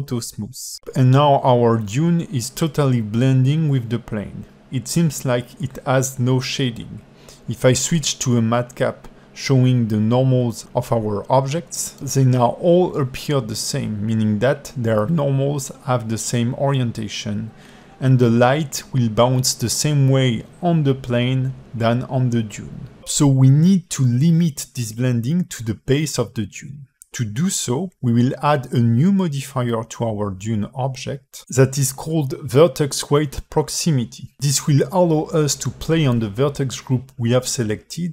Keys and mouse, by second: 5.5-6.6 drag, 7.1 click, 7.6-13.5 drag, 13.9-20.2 alt+middle drag, 24.1 click, 27.2-38.1 drag.